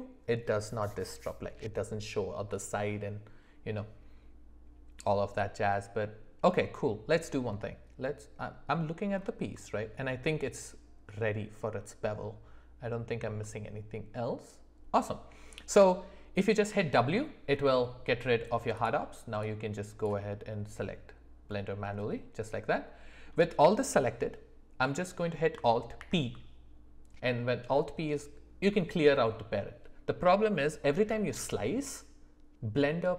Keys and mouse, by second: 8.4-8.8 middle drag, 9.7-10.1 shift+middle drag, 13.4-15.0 middle drag, 16.7 w, 19.4 click, 21.5-23.2 middle drag, 26.0 alt+p.